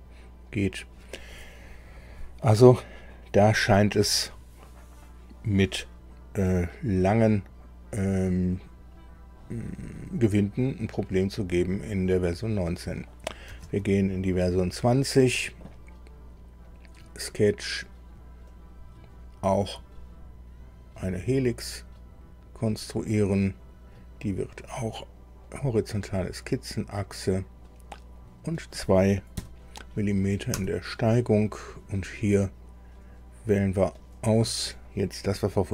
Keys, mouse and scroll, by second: 13.7 alt+Tab, 16.6 click, 18.5 click, 24.6 click, 25.4 click, 28.2 click, 29.3 KP_2, 30.5 Tab, 33.7 click.